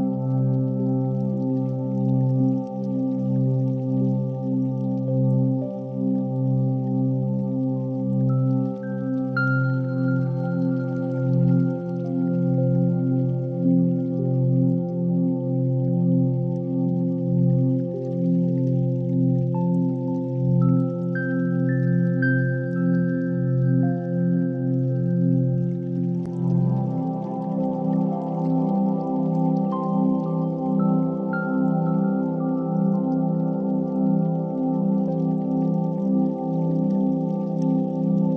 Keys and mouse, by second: 0.4 Tab, 1.0 1, 1.8 click, 3.5 g, 7.2 Tab, 7.6 r, 10.6 g, 12.8 s, 14.7 g, 16.1 s, 17.3 g, 19.0 alt+z, 20.5 KP_1, 21.7 alt+z, 22.0 g, 23.8 g, 25.3-26.0 middle drag, 26.1 alt+z, 26.6-29.2 middle drag, 29.5-29.9 shift+middle drag, 31.9-35.6 drag, 36.1-36.5 shift+middle drag, 36.9 g.